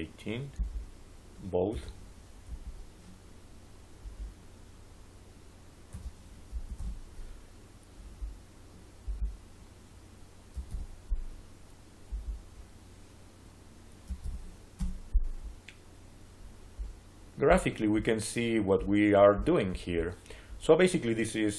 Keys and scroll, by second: 1.6 1, 2.4 8, 5.8 1, 6.4 8, 6.7 Return, 10.1-11.1 typing, 13.7-14.6 typing, 14.7 Return.